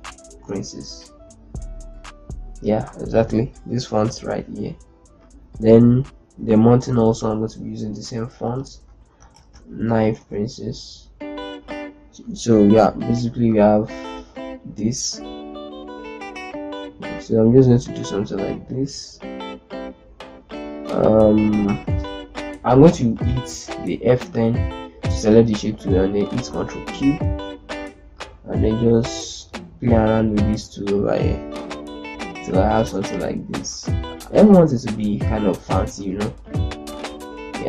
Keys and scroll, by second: 0.0 Return, 9.0-9.9 typing, 23.2 F10, 26.3 ctrl+q, 32.5 ctrl+shift+space.